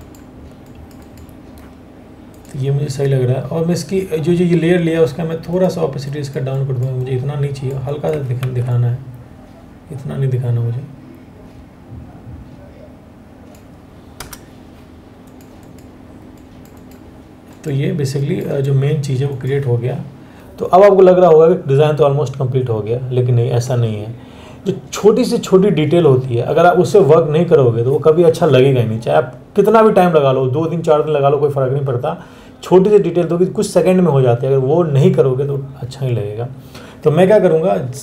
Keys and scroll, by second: 8.0 ctrl+t, 13.0 ctrl+t, 13.8 Return.